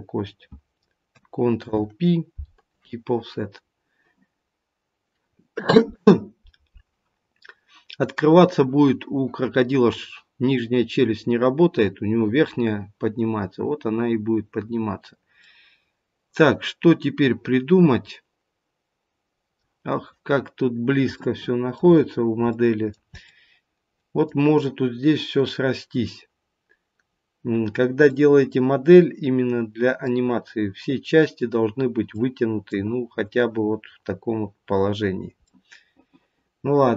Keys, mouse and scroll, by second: 1.5 ctrl+p, 13.9-14.5 scroll down 2, 15.3 middle click, 15.3-15.8 scroll down 1, 19.8-20.9 scroll up 1, 20.9 scroll up 1, 21.1 shift+middle click, 22.0 scroll up 1, 22.5 middle click, 23.2 middle click, 25.5-26.3 scroll down 1, 26.3-27.0 scroll down 1, 28.0 middle click, 28.0-28.6 scroll down 1, 32.1 middle click, 34.9 scroll down 2, 35.4 middle click.